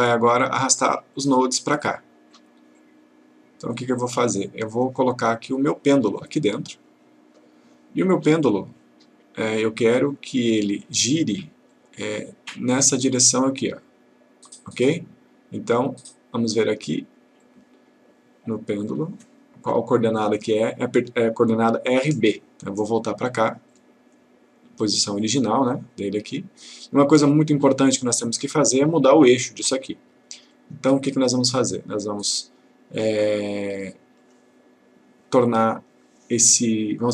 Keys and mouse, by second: 3.1-5.0 click, 6.4-7.6 click, 10.1-10.7 click, 13.9-16.0 click, 23.7 click, 27.6-28.6 click, 30.6-31.8 click, 34.2 click.